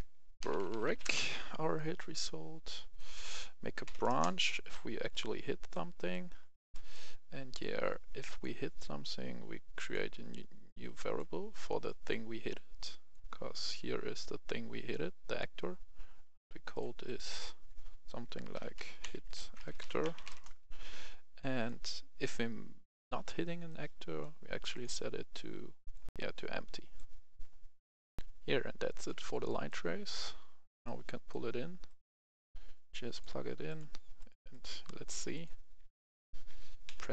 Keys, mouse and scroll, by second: 0.4-0.9 typing, 1.0 Return, 1.7-2.9 right drag, 3.0 click, 3.9 typing, 4.1 Return, 5.2 click, 6.0 right click, 7.6-13.9 drag, 18.5-20.3 typing, 20.3 Return, 21.4-27.9 drag, 28.2 F10, 28.9 click, 29.4 right click, 30.8-32.9 drag, 35.8-37.1 typing.